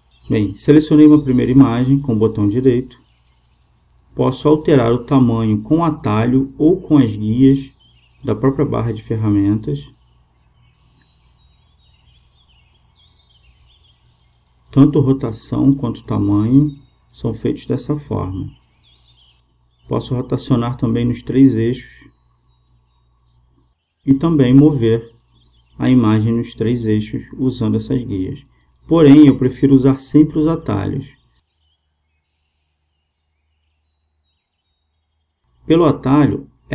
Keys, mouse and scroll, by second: 1.6-4.9 right drag, 7.9-11.9 drag, 12.3-14.5 drag, 14.5 ctrl+z, 15.1 ctrl+z, 18.6-22.1 drag, 22.6-24.6 drag, 25.1 ctrl+z, 25.6 ctrl+z, 28.1-33.6 drag, 33.8 ctrl+z, 34.4 ctrl+z, 36.3 s.